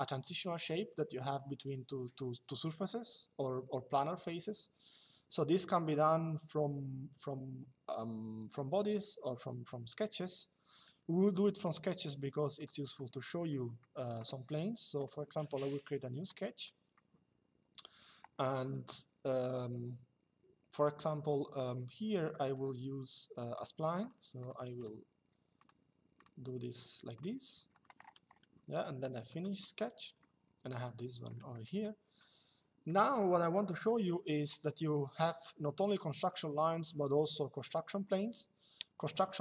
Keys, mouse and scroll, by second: 11.3 click, 13.2 middle click, 14.7 click, 22.2 click, 27.3 Escape, 29.0 click, 29.9 middle click, 31.2 middle click, 32.6 middle click.